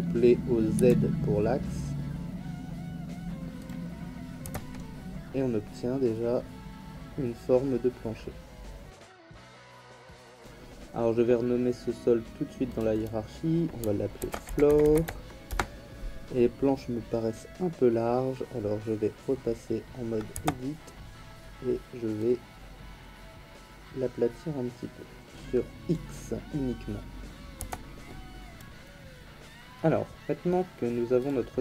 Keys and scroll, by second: 0.8 z, 4.4 Tab, 14.2 shift+f, 14.4 l, 14.7 o, 15.0 r, 15.5 Return, 20.3 Tab, 27.6 Tab.